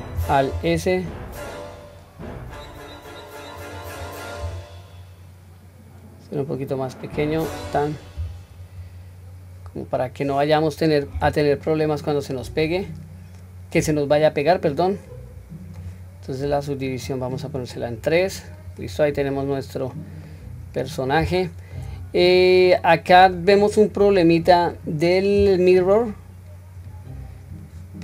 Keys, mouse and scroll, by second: 0.6 alt+s, 8.9-9.2 scroll down 1, 11.2 Tab, 11.2-11.7 scroll down 2, 11.7-14.4 middle drag, 15.3 scroll down 1, 17.1 click, 17.1 scroll up 1, 17.7-18.3 middle drag, 18.8 click, 19.3 scroll down 1, 19.9 middle click, 19.9 scroll down 1, 20.6 scroll up 2, 21.2 scroll up 1, 21.4-21.7 shift+middle drag, 22.0-22.4 scroll up 1, 22.4-23.3 middle drag, 26.8 click, 27.5 click.